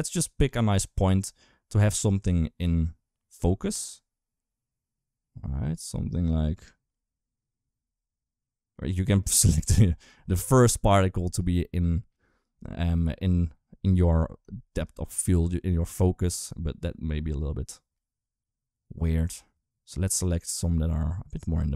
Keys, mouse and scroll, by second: 14.7-21.7 shift+drag.